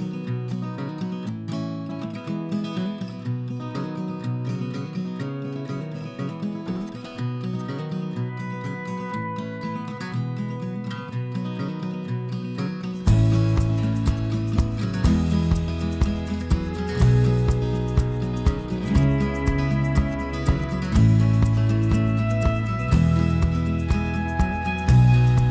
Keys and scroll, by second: 1.1 f, 2.7 ,, 4.8-5.4 typing, 8.0 Escape, 8.0 p, 19.8 Escape, 21.1 p, 23.4 e.